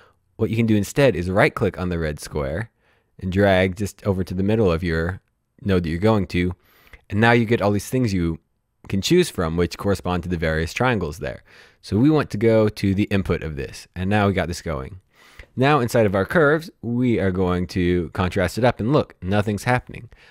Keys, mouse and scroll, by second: 2.5 right click, 13.0 click, 17.6 click.